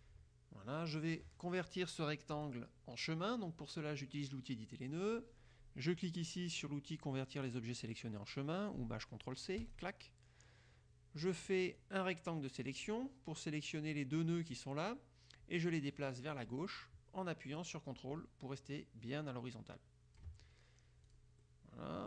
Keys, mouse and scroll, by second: 2.5 click, 9.8 click, 11.9-13.2 drag, 16.9-20.5 drag, 21.2 click, 21.5-22.0 drag.